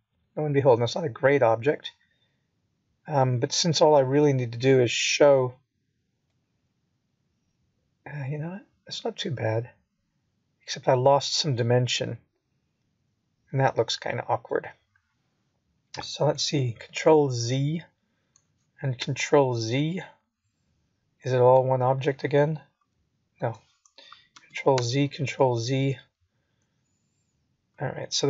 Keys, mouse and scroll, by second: 3.8 alt+p, 6.4 p, 13.1 click, 15.2 Tab, 15.8 click, 17.0 g, 19.8 middle click, 24.2 scroll up 2, 25.0 middle click.